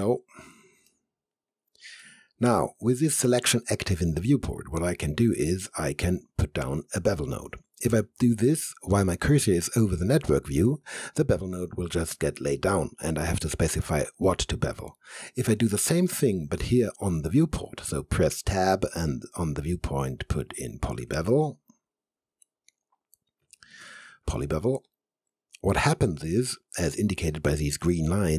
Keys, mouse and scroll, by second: 0.4 alt+click, 0.9 alt+middle click, 1.5 alt+click, 2.1-3.4 alt+middle drag, 18.5 Tab, 20.9-21.8 typing, 23.6-24.4 typing, 24.9 click.